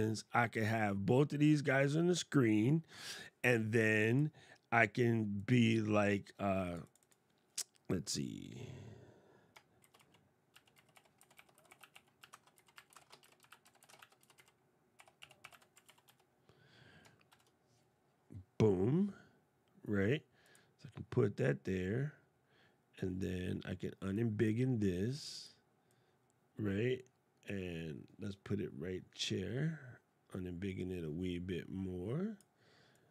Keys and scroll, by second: 9.6 shift+t, 13.0 shift+e, 13.7 shift+a, 17.0 shift+1.